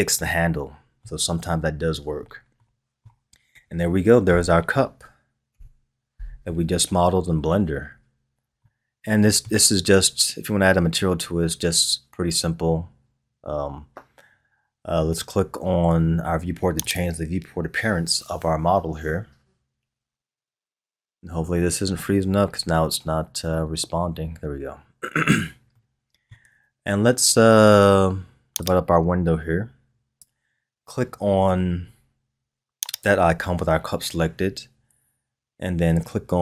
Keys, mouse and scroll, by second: 4.2 KP_3, 5.5 KP_1, 8.0-8.6 scroll down 2, 8.6-11.7 middle drag, 23.5 click, 25.7-28.6 middle drag, 28.6-31.1 drag, 31.1-32.3 scroll down 6, 33.0 click.